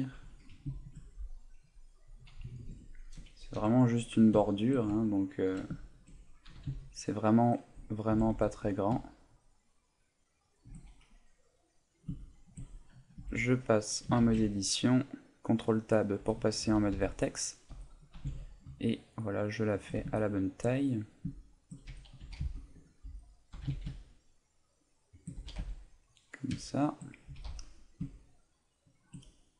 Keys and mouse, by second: 0.1 click, 0.3 middle click, 0.7 s, 2.5 click, 3.6 KP_Decimal, 4.5 shift+middle click, 5.0 ctrl+middle click, 5.8 shift+middle click, 6.6 g, 8.0 right click, 8.2 g, 10.6 shift+click, 11.5 middle click, 12.2 shift+middle click, 13.2 Tab, 14.2 ctrl+Tab, 16.2 z, 16.6 a, 16.9 b, 19.8 shift+click, 20.2 shift+middle click, 20.9 middle click, 21.4 shift+middle click, 21.9 z, 22.2 a, 22.4 b, 23.0 z, 25.2 shift+click, 25.4 a, 25.6 Tab, 25.8 middle click, 26.6 shift+middle click, 27.3 s, 29.0 shift+click, 29.3 middle click.